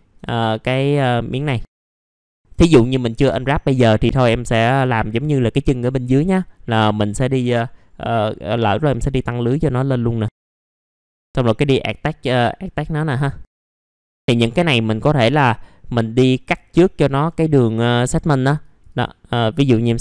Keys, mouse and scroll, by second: 0.7 click, 1.5 scroll down 1, 1.7 alt+middle click, 2.1 middle click, 2.6-3.2 scroll down 1, 3.2-3.9 scroll up 1, 3.9 middle click, 4.0-5.0 scroll down 1, 5.0-5.7 scroll up 1, 5.7 middle click, 6.1-7.7 scroll up 1, 8.6-9.7 right drag, 10.6 click, 11.0 middle click, 11.1 scroll up 1, 11.2 right click, 12.4 click, 13.1 scroll down 1, 13.4 alt+middle click, 13.7 scroll up 1, 13.9 right click, 16.1 click, 16.6 alt+middle click, 17.4-17.9 scroll up 1, 17.9-18.4 scroll up 1, 18.6-19.9 drag.